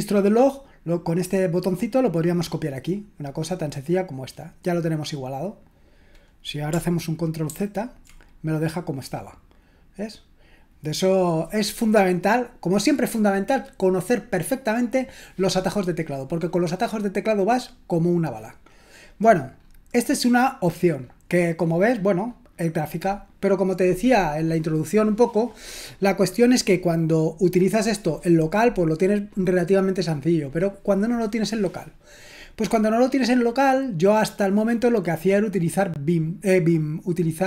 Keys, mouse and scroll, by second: 3.2-6.1 scroll down 1, 6.1-7.0 scroll down 1, 7.5 ctrl+z, 19.6-20.6 scroll down 1, 20.6-34.9 scroll down 1, 34.9-35.7 scroll down 1, 35.7-37.4 scroll down 1.